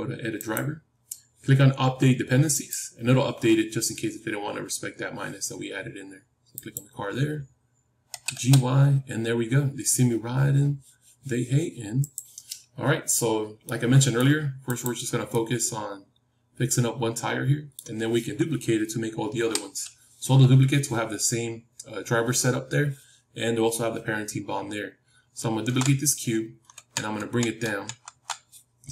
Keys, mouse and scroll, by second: 6.4-10.0 drag, 8.0 g, 13.6-17.3 middle drag, 14.6-16.6 drag, 19.3 KP_7.